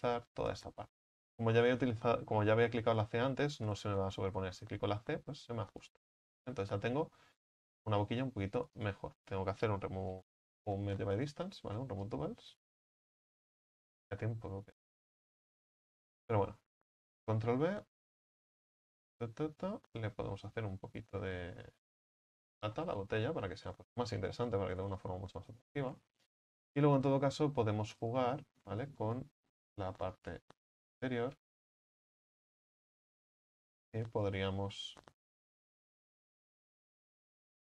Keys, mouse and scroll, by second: 6.0-6.5 scroll down 5, 6.5 shift+middle click, 6.9 scroll up 2, 7.2 a, 7.3 a, 8.9-12.2 drag, 12.2 w, 13.3 scroll up 2, 13.8 right click, 14.2-15.7 middle drag, 15.7 alt+shift+right click, 15.9 right click, 16.2 scroll up 2, 17.2 ctrl+b, 22.3 scroll down 2, 22.6 Tab, 22.8-23.3 middle drag, 23.3-25.0 scroll down 2, 25.0 Tab, 25.2 middle click, 25.7 scroll down 1, 25.9-28.2 scroll up 5, 28.2-28.6 drag, 28.6-29.1 scroll up 3, 29.1 right click, 29.7 right click, 30.1 alt+shift+right click, 32.4 s, 35.7 click, 36.6 shift+right click.